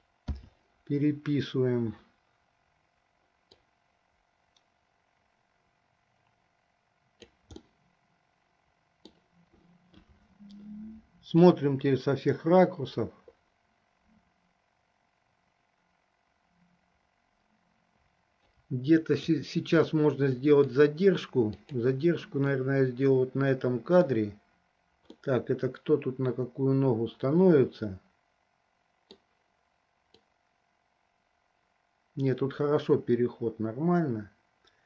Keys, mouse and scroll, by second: 0.5 i, 3.7-7.5 drag, 7.9-9.4 middle drag, 11.6-19.5 drag, 20.2-21.1 middle drag, 22.0 click, 22.9-24.5 middle drag, 25.5-29.6 middle drag, 30.3-34.8 drag.